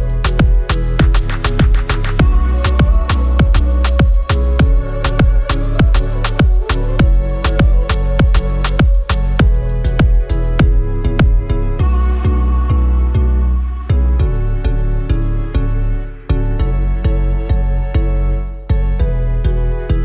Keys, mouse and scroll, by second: 0.5 middle click, 0.5-2.2 scroll down 6, 0.8 middle click, 1.1 middle click, 1.4 middle click, 1.8 middle click, 2.2-2.9 scroll up 3, 4.1 click, 4.9 click, 5.6 click, 9.0-9.4 scroll up 3, 9.4-9.8 alt+drag, 9.9 scroll up 2, 10.2 alt+middle click, 10.7-11.1 scroll down 3, 11.4 alt+middle click, 11.7 scroll down 1, 11.9 alt+click, 13.1 scroll down 2, 13.4 alt+click, 13.7 alt+middle click, 14.1 scroll down 1, 14.3 alt+click, 14.8 alt+middle click, 15.4 scroll down 1, 15.7-16.4 alt+drag, 18.1 alt+click, 18.2 alt+double click, 18.7-19.7 typing.